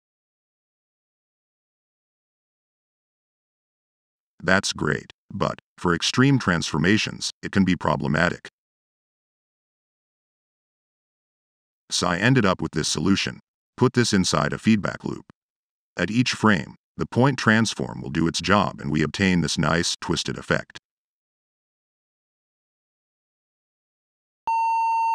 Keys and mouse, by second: 0.0 click, 0.9-2.1 middle drag, 2.7-3.1 drag, 3.6-5.0 middle drag, 5.0 click, 5.7-7.5 middle drag, 7.5-8.1 drag, 9.1 drag, 9.6 click, 10.8 click, 10.9 Tab, 11.2 f, 12.8 click, 13.6 drag, 14.2 drag, 14.7-15.1 drag, 15.5-16.0 drag, 16.4-16.9 drag, 17.3 drag, 18.4-20.2 drag, 20.5-20.9 drag, 21.0 middle drag, 21.3-21.8 drag, 21.9 middle click, 22.1 click, 22.6 click, 23.6 middle click.